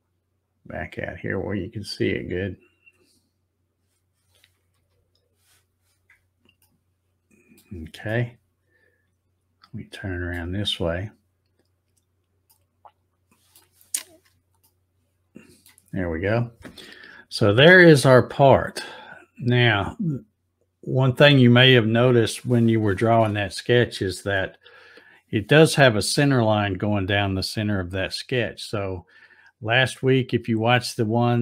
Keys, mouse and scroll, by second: 1.9 click, 2.5-3.3 scroll up 7, 4.7 z, 6.6 shift+middle click, 7.5 middle click, 10.3 middle click, 12.5-13.5 middle drag, 14.6 shift+middle click.